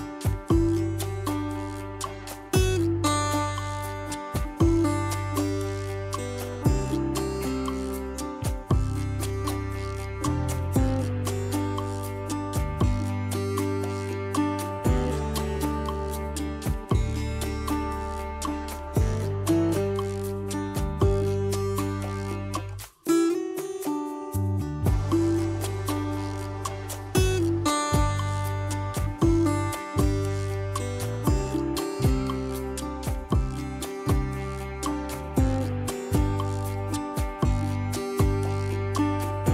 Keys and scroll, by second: 7.4 ctrl+z, 10.5 ctrl+d, 37.7 ctrl+alt+z, 39.1 ctrl+d.